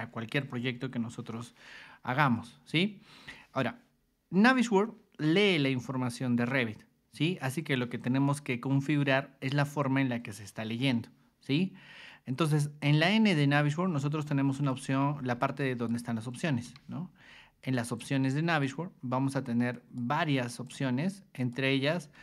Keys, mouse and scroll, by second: 12.9 click, 13.9 ctrl+2, 14.7 ctrl+click, 15.6 ctrl+shift+click, 16.6 Escape, 17.6 click, 18.5 click, 19.7 click, 20.6 click, 21.4 click.